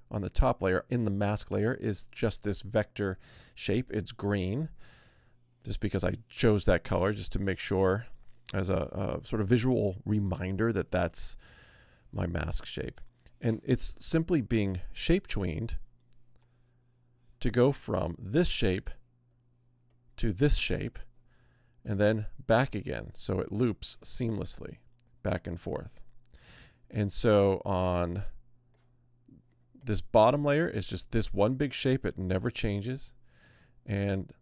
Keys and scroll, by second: 24.0 Return, 27.1 Return.